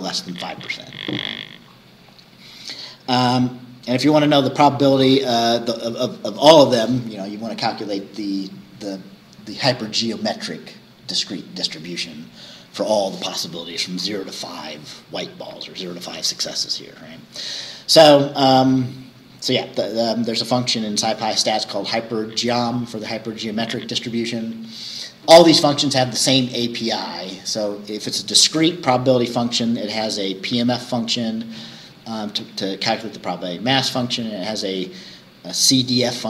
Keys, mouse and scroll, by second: 2.1-2.5 scroll down 2, 3.5-3.9 scroll down 2.